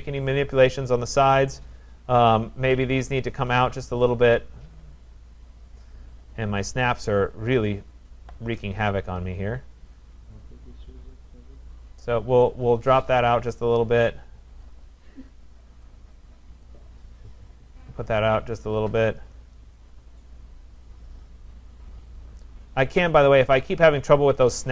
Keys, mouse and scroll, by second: 2.3 click, 7.2-7.5 scroll, 8.5 scroll, 12.0 click, 12.4-13.7 scroll, 14.7 click, 15.9 click, 18.9 scroll, 23.5 click.